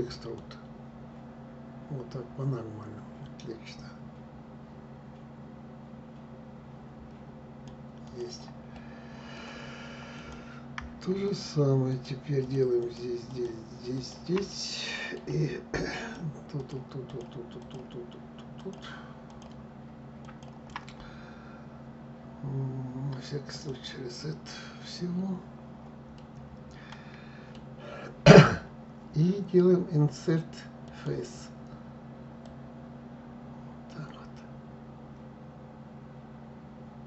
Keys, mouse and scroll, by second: 0.0 click, 7.7 click, 8.4-9.8 middle drag, 9.8 click, 10.9 shift+click, 11.5 shift+click, 12.1 shift+click, 12.5 shift+click, 12.9 shift+click, 13.6 shift+click, 14.1-15.6 middle drag, 15.6 shift+click, 16.2 shift+click, 16.7 shift+click, 17.2 shift+click, 18.2 shift+click, 18.9 shift+click, 19.9 shift+click, 23.2-25.8 drag, 25.8-28.8 middle drag, 30.5 click, 32.1 click.